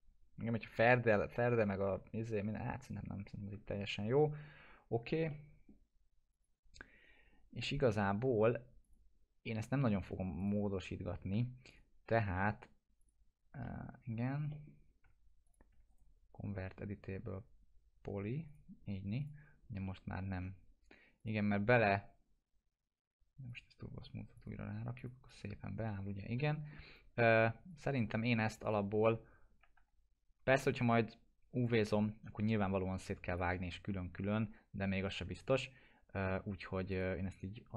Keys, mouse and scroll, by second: 0.0 scroll down 1, 1.6-3.8 alt+middle drag, 4.5 scroll up 1, 5.3-5.9 middle click, 6.3 click, 7.2 scroll down 1, 7.6 middle click, 8.8 click, 11.1 scroll up 1, 11.7 click, 13.6 middle click, 14.0-14.5 scroll down 1, 14.5 middle click, 15.4 ctrl+click, 15.9 right click, 18.4 click, 19.9 middle click, 20.2 scroll up 1, 21.2 click, 21.5 middle click, 23.5 click, 26.5 middle click, 26.8 scroll down 1, 27.7 click, 29.2 scroll up 1, 29.8 F4, 31.6 click, 36.9 click.